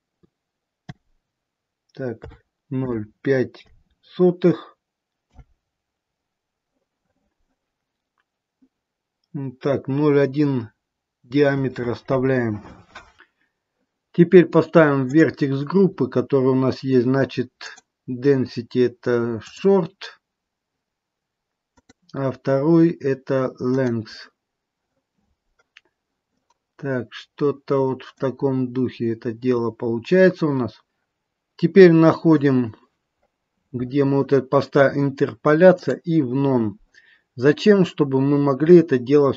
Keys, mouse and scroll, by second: 8.2-11.1 scroll down 2, 15.0 click, 15.8-17.6 scroll down 3, 17.6 click, 21.7 click, 25.8-26.3 scroll down 2, 26.3 middle click, 28.4 scroll up 2, 30.0-30.8 scroll down 1, 32.1-32.8 scroll up 2, 32.8-33.8 scroll up 6, 36.0 click, 38.3-38.7 scroll up 2, 38.8 scroll down 1.